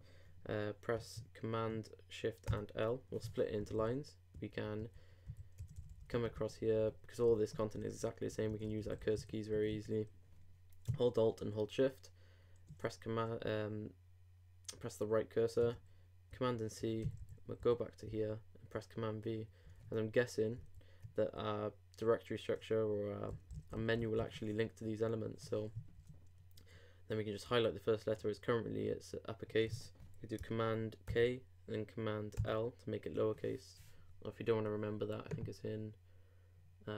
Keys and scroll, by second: 2.5 shift+super+l, 4.6 super+Right, 5.3 super+Left, 5.6 super+Right, 12.7 alt+shift+Right, 16.3 alt+shift+super+c, 17.0 super+Left, 18.0 super+Left, 18.1 super+v, 19.6 super+Left, 20.5 alt+Left, 26.0 shift+Right, 31.1 super+k, 32.4 super+l.